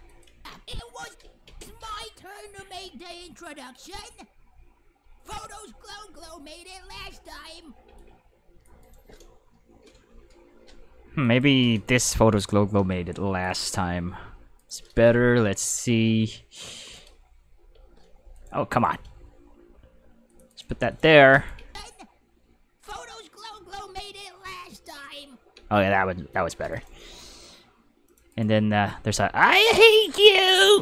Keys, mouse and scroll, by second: 0.1 click, 0.3 space, 1.1 space, 1.5 space, 7.8 space, 8.0 click, 8.8 right click, 9.8 k, 11.2 click, 12.0 click, 13.4 right click, 14.2 k, 14.6 right click, 15.3 g, 16.6 right click, 16.8 right click, 17.6 g, 18.3 right click, 18.7 right click, 19.6 g, 20.3 click, 20.7 g, 20.9 click, 21.3 click, 21.6 space, 25.6 space, 26.7 right click, 27.0 g, 28.1 click, 28.3 right click, 29.0 g, 29.4 click, 29.9 right click, 30.3 right click.